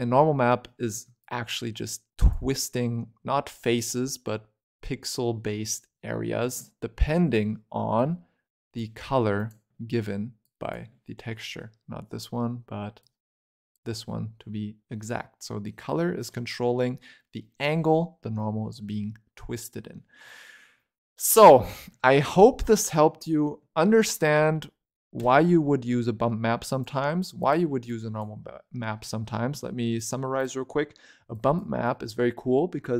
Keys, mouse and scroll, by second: 1.1-3.9 shift+drag, 3.9-5.8 scroll down 1, 5.8-6.7 scroll down 4, 6.7-7.9 scroll down 3, 7.9 click, 9.3 ctrl+Right, 10.3 click, 11.0-12.9 scroll up 2, 12.9 click, 14.4 middle click, 15.1 scroll up 2, 15.3 middle click, 15.7-17.1 scroll down 7, 17.1-20.2 middle drag, 22.5-23.1 scroll down 5, 23.1-23.9 scroll up 3, 23.9-25.1 scroll up 3, 25.1 click, 26.5 click, 27.7 click, 29.1 scroll down 3, 29.2 shift+middle click, 29.5-29.9 scroll up 8, 29.9 click, 31.7 click.